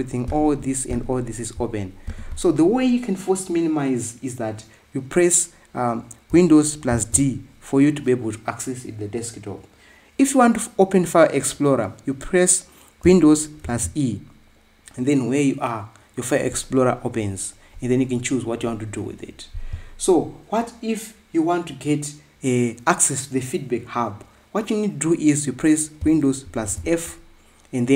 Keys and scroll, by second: 7.7 super+d, 14.4 super+e, 27.3 super+f.